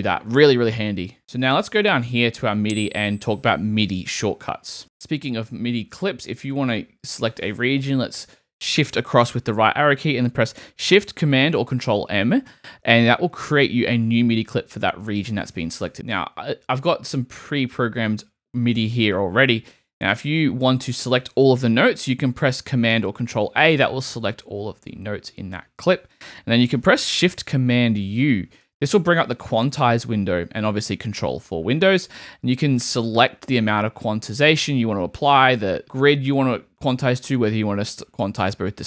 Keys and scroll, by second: 7.9 shift+Right, 12.5 shift+super+m, 22.9 super+a, 28.6 shift+super+u.